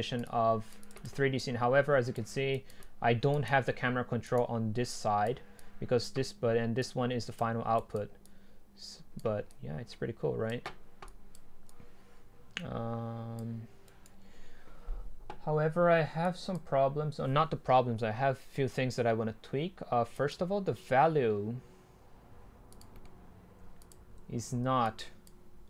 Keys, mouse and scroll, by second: 6.8 click, 7.0 click, 13.1 click, 13.9-16.2 right drag, 16.4-18.8 drag, 20.3-22.6 drag, 22.8-23.2 drag, 23.2 middle click, 24.1 click, 24.3 ctrl+z, 24.9 click.